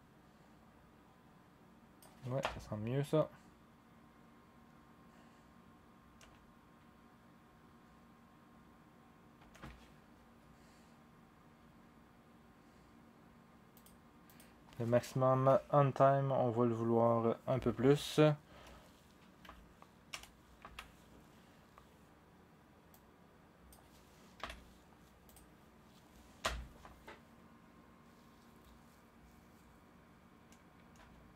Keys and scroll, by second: 2.4 0, 6.2 0, 9.4 0, 15.3 Right, 18.5-24.4 typing, 26.4 0, 30.9 0.